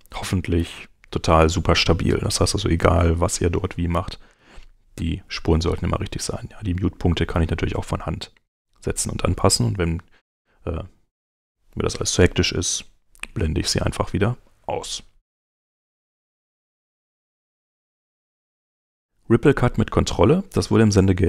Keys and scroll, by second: 0.3 super+y, 16.0 super+Tab.